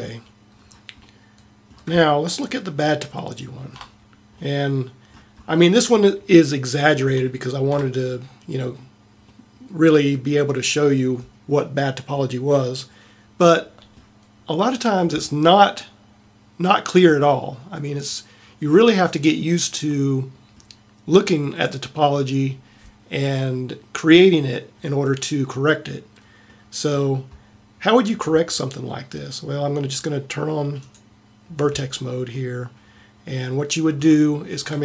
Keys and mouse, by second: 0.0-1.1 drag, 0.0 a.